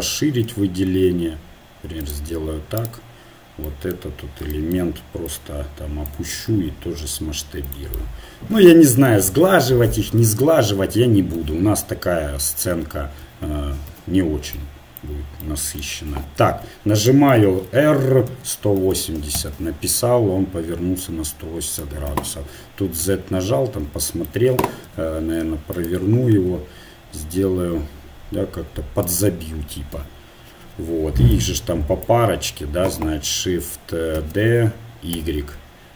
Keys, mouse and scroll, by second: 0.5 s, 2.8-4.4 drag, 5.3-6.5 drag, 6.5 s, 10.4 Tab, 11.4 KP_1, 12.7 z, 13.2 z, 13.9 KP_Divide, 16.1 KP_7, 18.6 r, 21.0-22.3 drag, 22.1 KP_1, 23.0 z, 24.9 r, 26.5 g, 28.4 g, 29.9 KP_7, 34.2 shift+d.